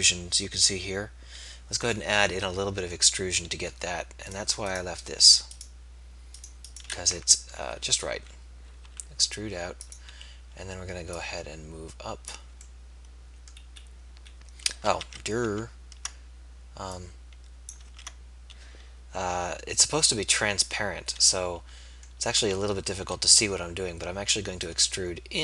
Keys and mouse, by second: 2.9 z, 8.2 KP_3, 8.9 e, 15.1 ctrl+z, 15.5 ctrl+z, 17.9 ctrl+z, 22.5 z, 23.1 e.